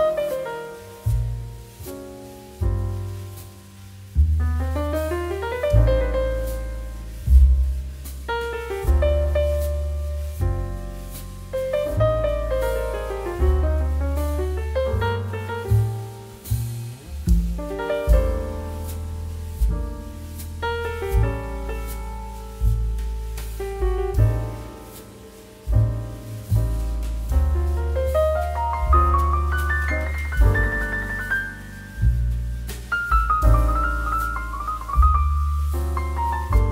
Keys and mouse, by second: 0.0 shift+z, 1.0 click, 1.2 middle click, 1.4 shift+d, 1.6 middle click, 3.6 Escape, 4.9 click, 7.5 click, 9.6 0, 9.9 click, 15.8 shift+middle click, 16.1 middle click, 16.4 shift+middle click, 16.9 shift+a, 17.8 click, 18.7 shift+d, 18.9 z, 19.1 click, 19.3 s, 20.6 click, 21.4 s, 22.6 click, 23.1 s, 24.1 click, 24.2 g, 25.0 click, 25.1 middle click, 25.6 g, 26.0 click, 26.2 middle click, 26.6 click, 26.8 middle click, 27.3 middle click, 27.6 click, 27.7 middle click, 27.9 shift+middle click, 28.1 middle click, 28.6 click, 29.2 middle click, 29.7 click, 29.9 s, 30.6 click, 30.7 middle click, 30.9 g, 31.1 z, 31.4 click, 31.5 middle click, 31.8 click, 31.9 middle click, 32.3 click, 32.7 Tab, 33.6 click, 33.9 g, 34.7 click, 34.9 z, 35.8 click, 35.9 middle click, 36.1 shift+middle click, 36.4 middle click.